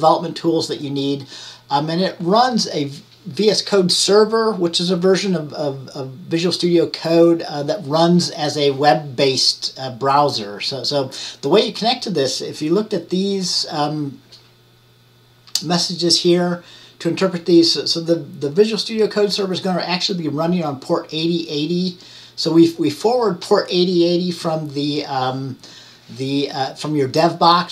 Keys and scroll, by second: 0.2 typing.